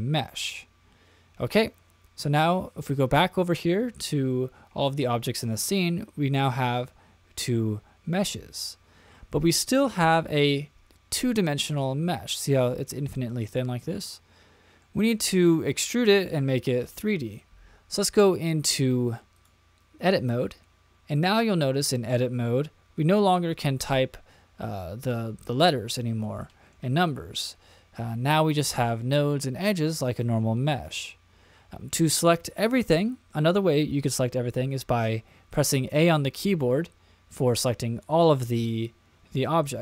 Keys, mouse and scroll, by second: 10.0-11.7 middle drag, 13.4-14.9 middle drag, 15.1-15.7 middle drag, 19.3-20.3 drag, 21.1 middle click, 24.8 middle click, 26.4 middle click, 27.9 middle click, 35.7 a.